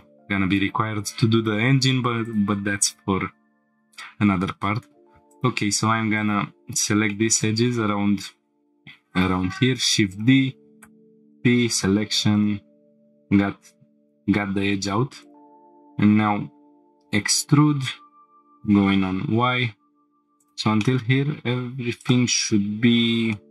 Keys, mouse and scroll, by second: 0.7 scroll up 1, 1.0 scroll down 1, 1.4 scroll up 1, 2.2 click, 3.7 Tab, 4.8 2, 5.3 click, 6.2 ctrl+click, 7.1 shift+middle drag, 7.7 scroll down 1, 8.0 scroll up 1, 9.7 shift+d, 10.1 right click, 10.8 p, 11.7 Tab, 12.3 click, 13.5 Tab, 14.3 1, 15.2 click, 15.5 scroll down 1, 17.0 e, 18.9 y, 20.4 click, 20.8 shift+middle drag, 22.0 click, 22.9-23.2 scroll up 3, 23.3 shift+middle click.